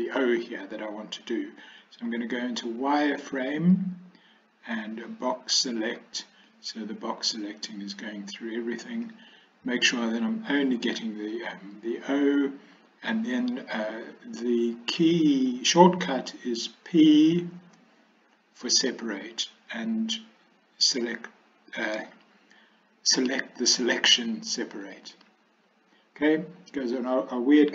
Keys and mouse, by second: 2.1 z, 5.6 b, 17.6 p.